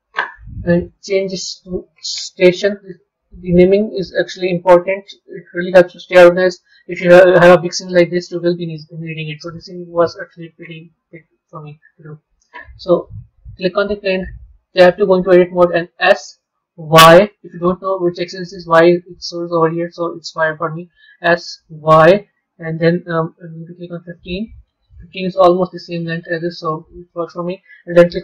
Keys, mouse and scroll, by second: 0.7 click, 0.8-3.6 drag, 3.6 BackSpace, 8.0-8.7 scroll down 5, 8.7-12.0 scroll up 3, 13.4 click, 14.8 b.